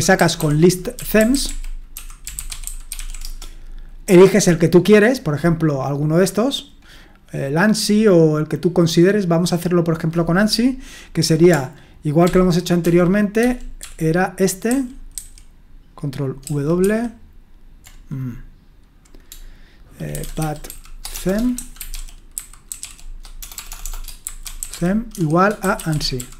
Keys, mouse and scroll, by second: 0.0-3.5 typing, 9.2-12.3 drag, 12.3 ctrl+p, 12.8 ctrl+p, 13.4 ctrl+p, 13.8 ctrl+p, 14.7 ctrl+q, 15.1 ctrl+q, 16.4 ctrl+w, 16.8 ctrl+w, 19.9-26.3 typing.